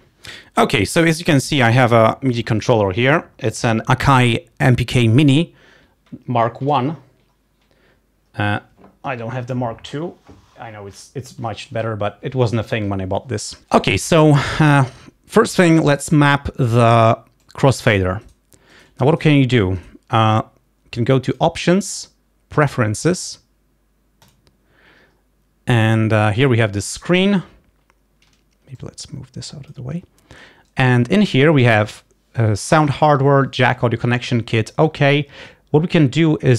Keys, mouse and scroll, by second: 17.7 click, 18.4 right click, 18.9-20.1 right drag, 19.5 click, 21.4 click, 24.3 click, 26.0 click, 28.9 click, 29.4-30.0 scroll up 1, 32.9 click.